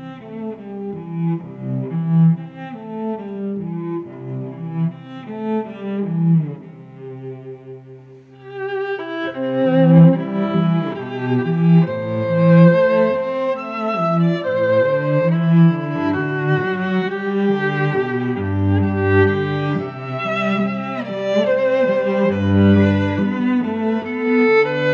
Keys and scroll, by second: 1.1 Return, 4.7 shift+Up, 6.9 Return, 7.3 v, 10.1 space, 13.0 a, 14.5 shift+Down, 16.0 Return, 16.2 v, 17.5 v, 20.2 ctrl+t, 21.6 Return, 22.3 ctrl+shift+[, 24.3 a.